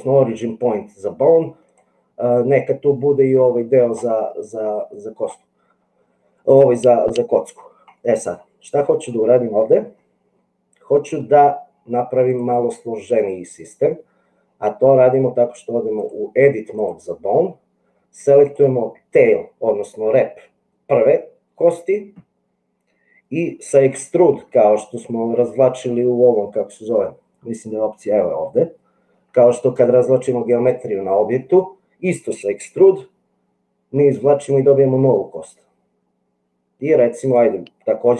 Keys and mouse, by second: 1.6 click, 3.4 click, 5.0 click, 8.0 middle click, 12.2 click, 16.1 click, 18.4 click, 32.8 e.